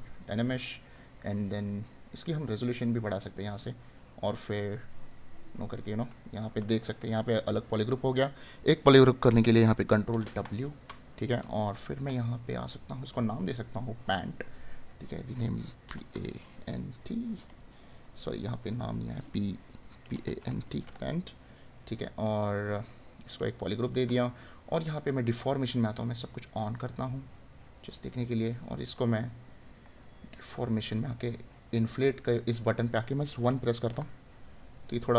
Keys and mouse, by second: 5.1 right click, 10.5 right click, 23.1 right click.